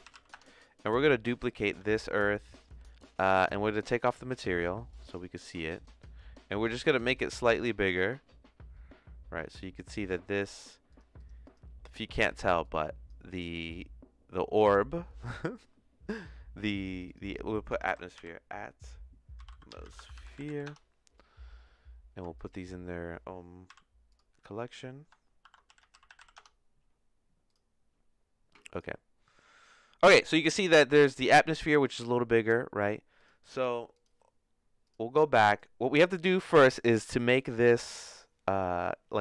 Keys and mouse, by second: 1.8 shift+d, 5.0 click, 6.7 s, 10.6 click, 10.9 click, 11.1 click, 11.4 click, 12.3 click, 12.6 click, 16.9-21.2 drag, 20.4 e, 22.4 ctrl+click, 23.6 m, 28.7-30.4 drag, 33.2 click, 34.8 click, 35.4 click.